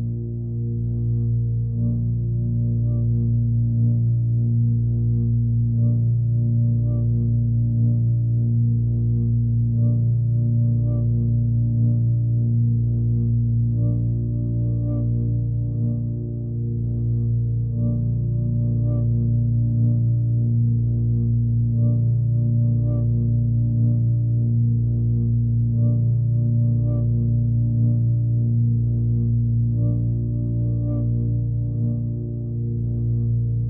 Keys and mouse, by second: 0.3 click, 1.5 click, 2.3 click, 4.0 click, 4.7-7.5 typing, 5.8 click, 8.7-9.4 typing, 8.9 click, 10.6 click, 11.5-16.3 typing, 12.2 click, 13.2 drag, 13.6 click, 14.0 click, 14.7 click, 16.5 click, 17.0 click, 17.5-18.2 typing, 17.7-18.3 drag, 18.8-19.3 drag, 20.1-21.5 typing, 20.4 click, 21.8 click, 23.0 click, 24.0 alt+click, 24.7 alt+click, 25.7 alt+click, 27.0-28.1 alt+drag, 27.8-28.6 typing, 28.7 click, 29.3 click, 29.6 click, 31.2 click.